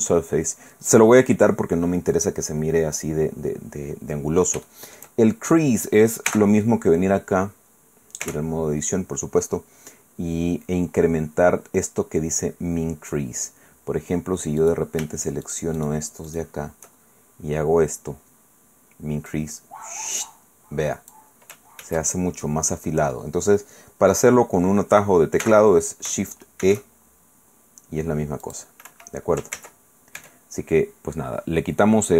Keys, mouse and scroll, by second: 0.3-1.0 scroll down 2, 1.8-2.5 scroll down 2, 2.5-2.9 scroll up 2, 3.4-4.2 scroll down 2, 4.6 shift+middle click, 5.2-5.5 shift+scroll up 2, 6.3 n, 8.2 Tab, 14.6 right click, 15.4 shift+right click, 16.3 shift+right click, 19.3-21.3 drag, 21.8 ctrl+z, 25.4 n, 26.6 shift+e, 28.4 click, 28.9 Escape, 29.8 ctrl+z, 30.4 Tab.